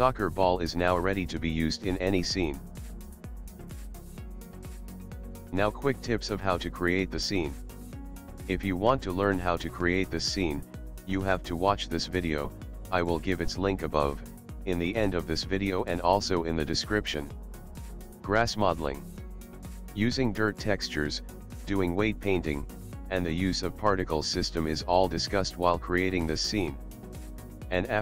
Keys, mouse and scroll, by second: 0.2 click, 0.5 s, 2.2 middle click.